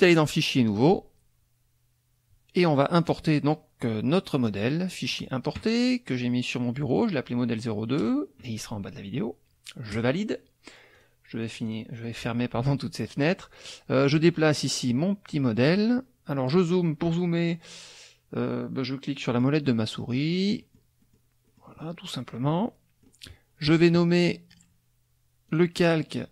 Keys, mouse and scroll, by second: 0.2 click, 0.7 click, 3.0 click, 5.1 click, 6.9-8.2 drag, 9.9 click, 11.0 click, 11.4 click, 14.1-15.8 drag, 19.3 click, 19.7 middle click, 20.6 click, 21.0 click, 21.5 click, 21.9-23.2 drag, 24.5 click, 25.5 click.